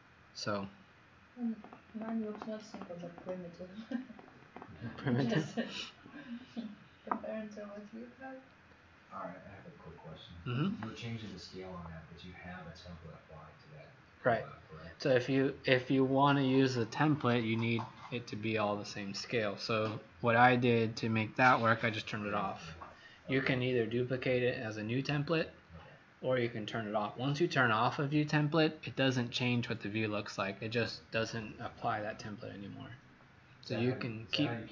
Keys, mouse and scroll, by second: 0.3 scroll up 1.